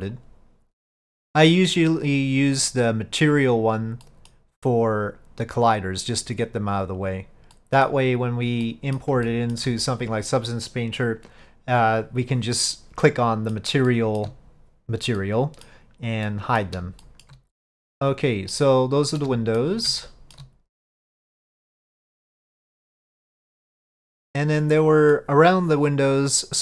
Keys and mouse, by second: 0.9 middle click, 2.1 click, 7.6 middle click, 8.8 middle click, 9.3 shift+middle click, 13.1-13.6 middle drag, 14.0-14.3 shift+middle drag, 15.3-15.8 middle drag, 16.4 middle drag, 17.1 shift+middle drag, 18.1-18.6 middle drag, 19.3-19.7 shift+middle drag, 20.1-20.4 shift+middle drag, 21.4 click, 24.7-25.2 middle drag.